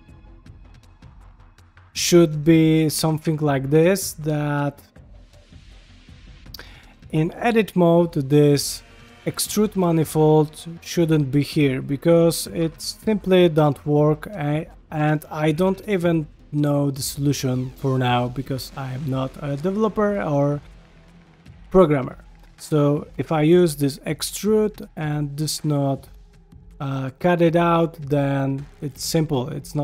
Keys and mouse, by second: 0.1 click, 0.3 g, 1.0 shift+middle drag, 2.3 shift+middle click, 2.8 ctrl+shift+middle click, 3.5-3.8 right drag, 4.6 shift+a, 7.1 Tab, 8.3-9.6 drag, 10.1 click, 11.0 a, 12.6 3, 12.8 click, 13.7 i, 14.6 middle click, 15.3 shift+middle click, 15.6 ctrl+middle click, 16.1-17.8 middle drag, 18.0 shift+middle click, 18.4 shift+middle click, 18.8 shift+middle click, 19.3 middle click, 19.9 middle click, 21.0 s, 21.9 middle click, 23.7-24.9 drag, 25.0 middle click, 25.9-28.2 middle drag.